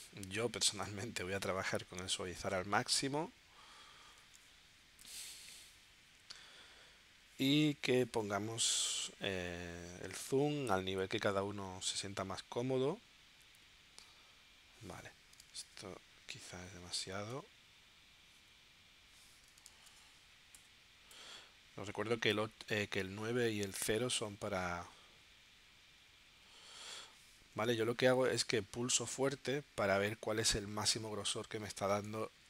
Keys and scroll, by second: 5.0 shift+super+p, 10.8 9, 15.4 super+z, 17.3 8, 19.7 super+z, 20.5 8, 22.8 9, 27.7 super+z.